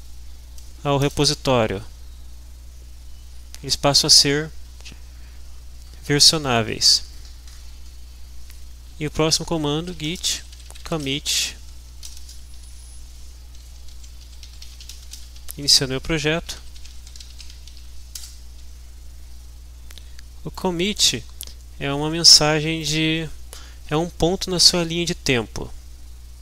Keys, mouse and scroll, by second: 1.0 Return, 9.6-12.6 typing, 13.7-18.2 typing, 20.6 click, 22.9 click.